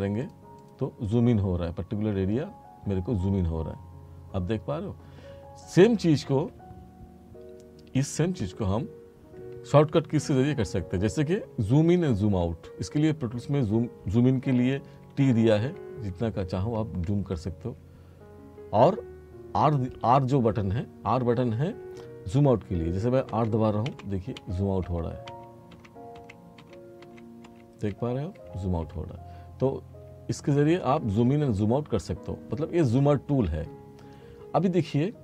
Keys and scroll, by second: 15.1 t, 23.3 r, 30.0 t, 31.5 r.